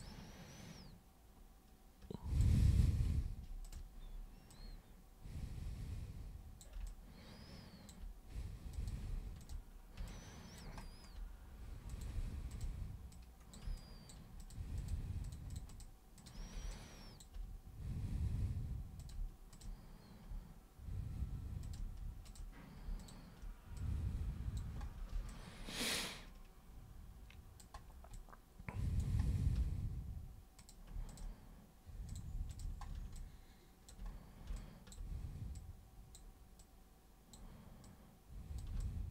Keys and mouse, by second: 3.6 shift+super+click, 4.4-6.6 super+drag, 6.8-7.9 alt+super+drag, 8.7 super+click, 9.4 shift+super+click, 10.0 alt+super+click, 11.8 super+click, 12.5 shift+super+click, 13.1 super+click, 13.7 shift+super+click, 14.3 shift+super+click, 14.7 shift+super+click, 15.2 shift+super+click, 15.5 shift+super+click, 15.7 shift+super+click, 16.2 shift+super+click, 16.7 alt+super+click, 18.9 click, 19.5 shift+click, 21.6 shift+click, 22.3 shift+click, 22.9 shift+click, 23.8 click, 25.3-27.6 alt+super+drag, 28.1 alt+super+click, 30.6 super+click, 31.1 shift+super+click, 32.1 super+click, 32.5 shift+super+click, 33.1 alt+super+click, 34.5 alt+click, 35.5 click, 36.6 click, 37.8 click, 38.8-39.1 alt+drag.